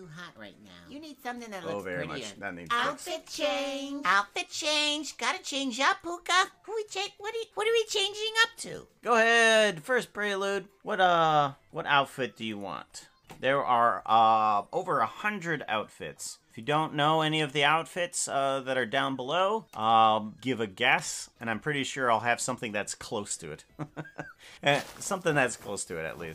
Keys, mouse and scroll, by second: 5.4 click.